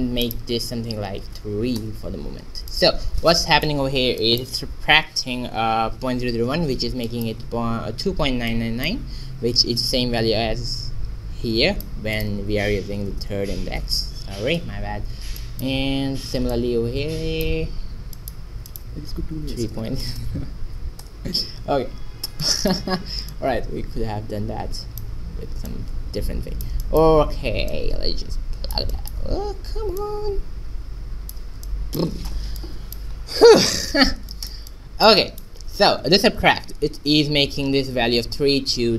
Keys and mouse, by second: 0.3-2.2 drag, 2.2-9.8 middle drag, 9.8-11.6 drag, 12.1-14.1 drag, 13.9 KP_9, 15.3-16.4 middle drag, 16.4-17.8 drag, 20.1 KP_0, 22.4 middle click, 23.3 click, 25.6-29.0 drag, 31.6 click, 32.1-37.5 middle drag.